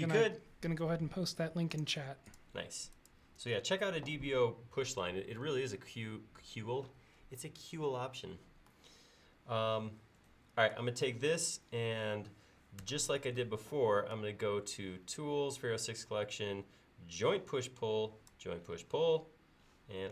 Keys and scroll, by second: 12.8 ctrl+s.